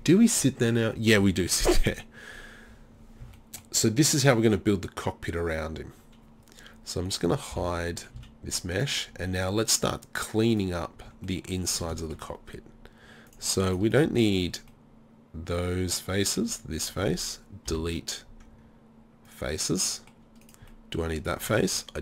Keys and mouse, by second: 1.6 middle click, 2.7 z, 3.0 click, 3.2 z, 3.9-5.0 middle drag, 7.5 h, 8.2 z, 11.1 Tab, 14.7 middle click, 17.7 Delete, 19.6 middle click, 20.4-22.0 right drag.